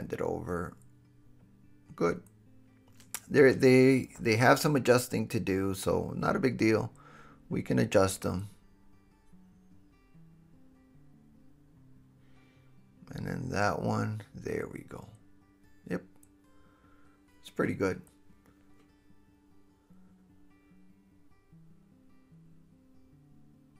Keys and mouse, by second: 3.0 click, 3.3-11.6 middle drag, 3.3 r, 4.4 r, 6.4 r, 7.9 r, 9.1 r, 11.6 click, 11.7 middle click, 12.1 s, 12.7 middle click, 13.9 r, 15.4 s, 16.0-17.1 middle drag, 17.4 middle click, 18.1 click, 18.6 middle click, 19.0-20.0 drag, 20.0 middle drag, 20.3-21.3 drag, 21.3-23.7 middle drag.